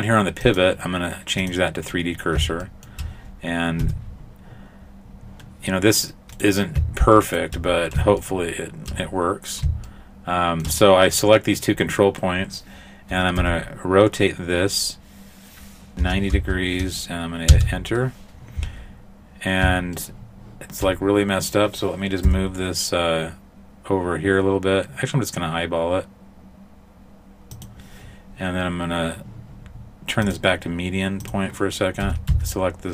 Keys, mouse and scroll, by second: 0.5 click, 2.2-3.6 scroll down 2, 2.7 shift+middle click, 3.9 Tab, 4.7-5.5 scroll up 3, 6.4 right click, 7.3 shift+right click, 7.7-8.2 scroll down 1, 8.2 shift+middle click, 8.2-8.9 scroll down 2, 9.9 shift+middle click, 13.4 r, 18.9 scroll up 1, 20.0 shift+middle click, 22.3 g, 30.3 click, 32.1 a, 32.3 a.